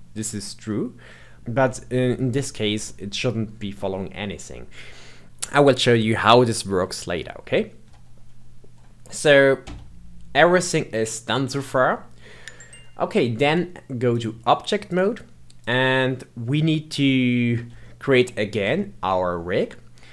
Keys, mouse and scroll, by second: 0.1-0.7 scroll down 2, 0.7-5.2 middle drag, 9.6 Tab, 13.5-14.9 drag, 15.6 click, 17.8-18.2 shift+middle drag, 18.2-18.7 scroll down 2, 18.7-20.1 shift+middle drag.